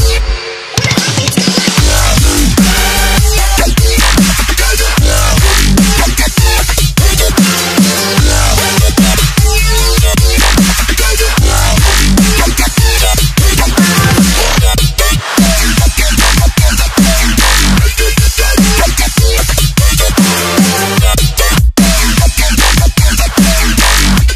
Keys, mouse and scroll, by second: 3.8 click, 6.5 click, 7.7 click, 9.1 click, 12.8 Delete, 13.7 right click, 20.9 alt+click, 22.5 Return.